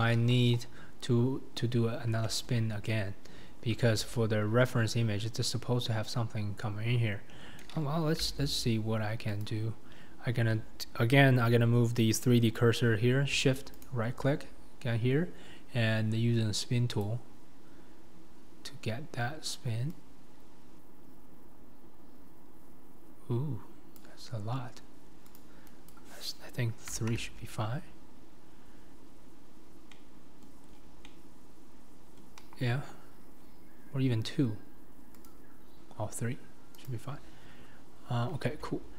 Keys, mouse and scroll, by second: 0.2 KP_1, 0.5-1.9 scroll down 3, 1.9-2.2 scroll down 1, 2.2-8.3 shift+middle drag, 8.3 g, 17.0-19.9 drag, 27.1-28.5 drag, 29.9 middle click, 30.4 scroll, 31.1-32.4 middle drag, 33.0-33.4 scroll, 35.3-36.9 drag, 38.6 Tab.